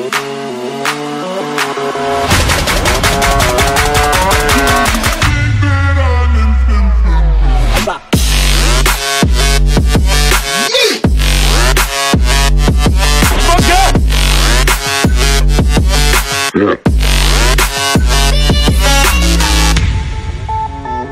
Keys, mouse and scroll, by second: 1.5 click, 2.6 z, 7.2 click, 8.0 click, 9.4 click, 9.4 z, 9.8 middle click, 10.0 middle click, 10.3 middle click, 10.5 middle click, 12.4 shift+click, 13.4 click, 14.1 ctrl+click, 16.7 click, 17.5 click, 18.3 middle click, 18.4 middle click, 19.6 middle click, 20.9 click.